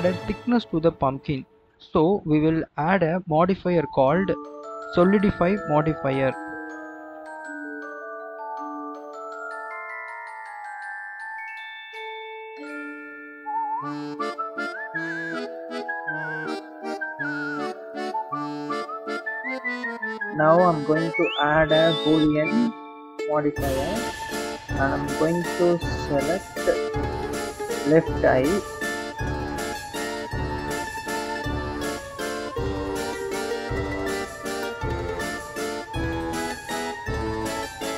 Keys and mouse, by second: 3.1-4.8 drag, 7.1-11.7 drag, 12.6 click, 12.9 click, 13.1 click, 13.8 click, 13.9 click, 14.5 click, 16.7-18.2 drag, 19.6 click, 20.7-22.5 drag, 22.7 click, 24.7 click, 26.5-28.3 drag, 29.5-30.4 drag, 33.7 h, 35.5 ctrl+z.